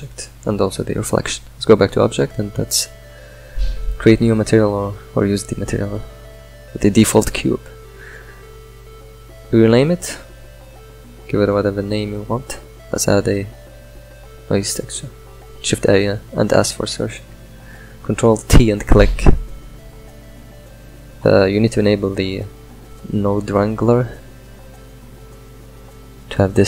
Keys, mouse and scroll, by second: 3.3-8.1 drag, 10.7-21.1 middle drag, 21.1-26.5 drag.